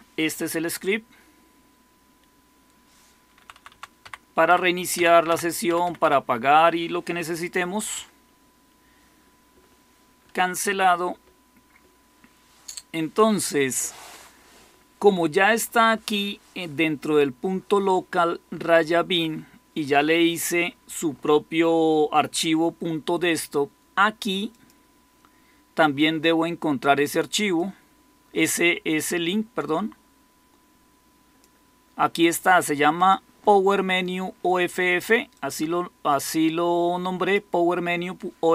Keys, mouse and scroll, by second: 3.3 Down, 3.5 Down, 3.6 Down, 3.9 Up, 4.4 Up, 4.8 Down, 5.2 Down, 5.6 Up, 5.7 Up, 5.9 Up, 7.9 Escape.